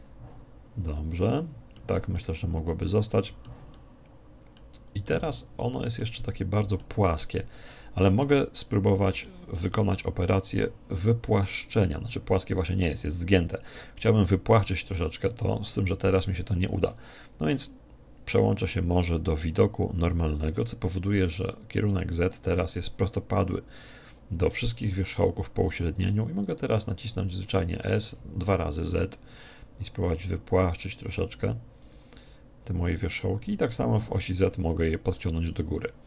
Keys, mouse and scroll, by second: 9.3 middle click, 17.5 click, 31.9 click, 33.7 click, 35.2-36.0 middle drag.